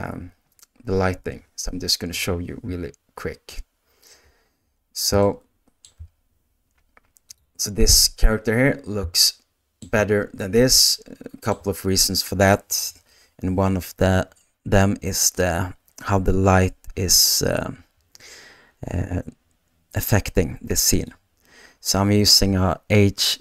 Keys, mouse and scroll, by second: 2.2 KP_0, 5.2 shift+middle click, 7.2 click, 9.5 shift+middle click, 10.9-23.4 shift+middle drag.